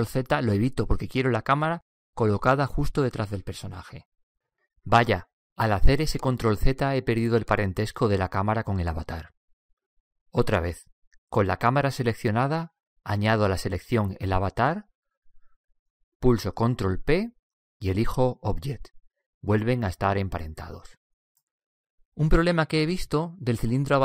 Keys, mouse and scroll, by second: 0.4 ctrl+z, 2.5-5.0 right drag, 3.5-5.3 drag, 6.5-12.3 right drag, 13.7-15.6 right drag, 16.1 ctrl+p, 20.8-22.7 right drag.